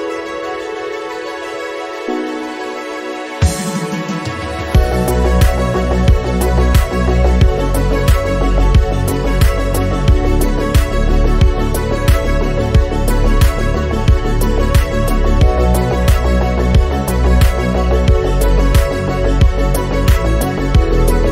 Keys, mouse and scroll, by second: 0.2 t, 0.7-2.7 drag, 1.3-1.7 scroll down 1, 2.1 KP_7, 2.2-2.9 scroll up 11, 2.9 shift+middle click, 3.7 click, 5.8 scroll down 2, 5.9 scroll up 1, 6.7-7.9 drag, 7.9 shift+middle click, 8.3 click, 8.5 shift+middle click, 8.9 g, 10.3 r, 11.8 click, 12.4 r, 14.0 g, 15.5-16.8 scroll down 3, 15.7 click, 16.8-17.3 scroll down 2, 17.3 s, 18.1 click, 18.7-19.3 scroll up 1, 19.3 click, 19.5 scroll down 4, 19.6 middle click, 19.8 scroll up 1, 19.9 scroll down 1, 20.2 click.